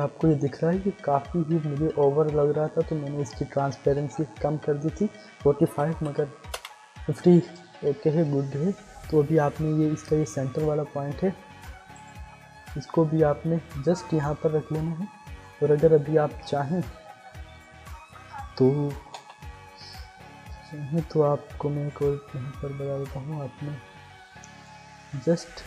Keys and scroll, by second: 3.9 t, 5.4-6.3 typing, 6.5 Return, 19.2 l.